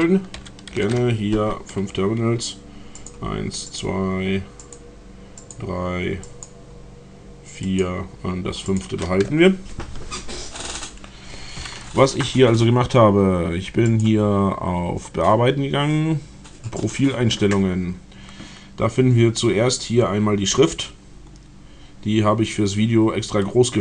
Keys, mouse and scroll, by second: 0.4 ctrl+alt+t, 0.8 ctrl+alt+t, 3.0 click, 3.7 click, 4.5 click, 5.4 click, 6.0 click, 6.2 click, 7.7 click, 8.7 click, 14.0 click, 16.8 click.